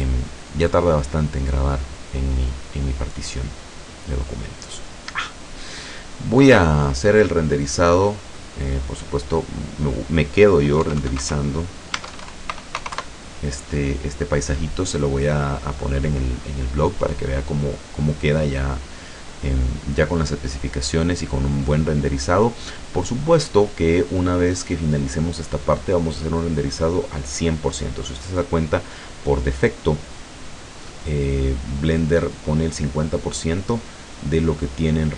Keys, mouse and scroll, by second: 8.8-9.1 scroll down 2, 9.5 click, 10.9-12.8 typing, 12.0 Tab, 13.0 KP_Enter, 22.5-22.9 scroll up 2, 23.3-23.8 scroll up 2.